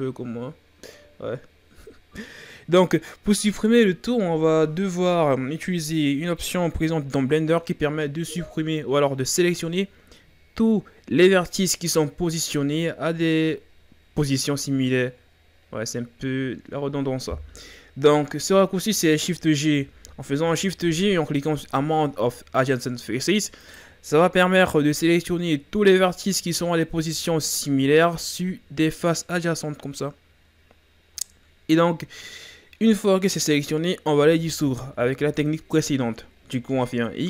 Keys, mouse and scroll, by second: 19.8 shift+g, 25.3-27.7 scroll down 2, 34.2 x.